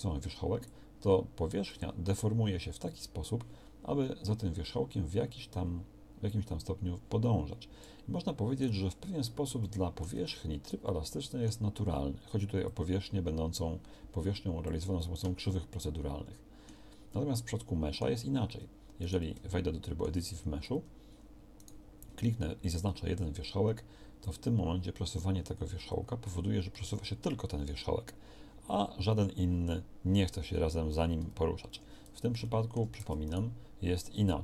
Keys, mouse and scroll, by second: 15.4 middle click, 16.6 middle click, 17.2 middle click, 18.5 Tab, 20.7 Tab, 33.0 Tab, 34.0 Tab.